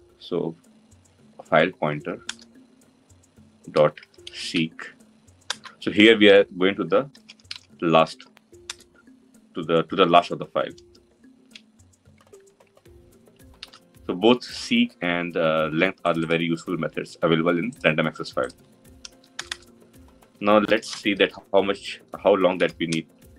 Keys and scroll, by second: 2.0 Return, 7.0 Return, 13.5 ctrl+alt+l.